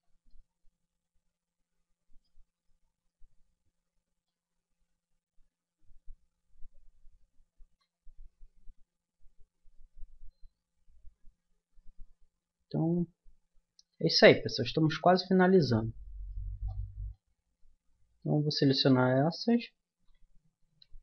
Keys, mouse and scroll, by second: 0.5 middle click, 2.5 middle click, 4.8 Tab, 5.5 Tab, 7.6 KP_1, 12.8-16.8 middle drag, 17.9 Tab, 18.7 right click, 20.4 middle click, 20.7 g.